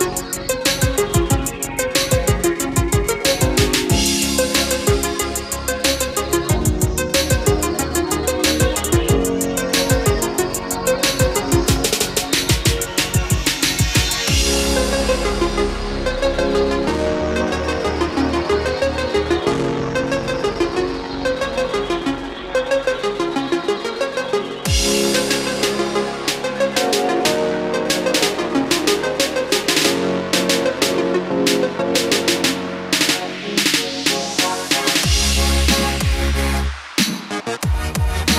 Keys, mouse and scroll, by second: 1.0-1.6 scroll up 1, 4.0-21.8 drag, 34.3 KP_1.